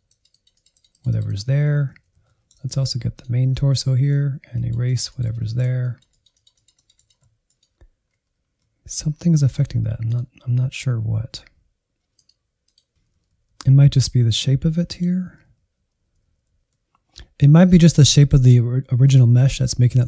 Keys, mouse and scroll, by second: 1.3 alt+z, 1.6 shift+middle click, 2.3 ctrl+click, 2.6 alt+z, 3.0 click, 3.5 shift+middle click, 3.8 click, 4.6 middle click, 5.2 click, 5.8 middle click, 6.2 click, 6.8 scroll down 1, 6.9 middle click, 7.3 alt+z, 8.0 ctrl+click, 9.1-10.9 drag, 10.9 scroll down 4, 11.2 middle click, 11.8-12.7 Left, 13.0 scroll up 2, 13.2 middle click, 13.5-13.9 Right, 14.1 Right, 14.2-14.6 Right, 16.1 shift+middle click, 16.5 scroll up 1, 16.7-19.6 middle drag.